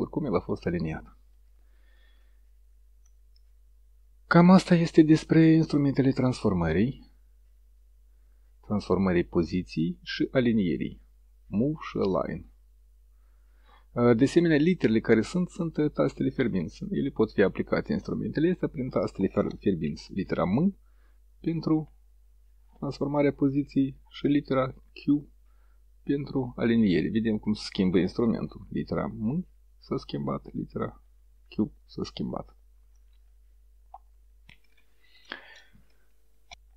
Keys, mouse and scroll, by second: 9.2-18.3 drag, 20.3 m, 24.9 q, 29.3 m, 31.4 q, 34.6 s.